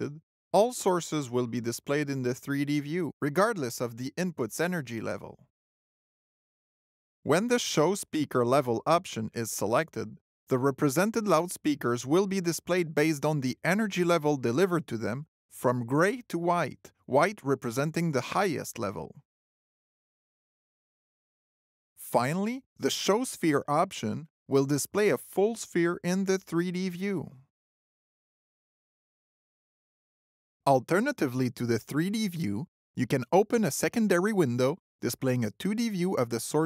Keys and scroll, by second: 0.3 alt+a, 12.9 alt+l, 24.4 alt+o, 34.5 alt+d.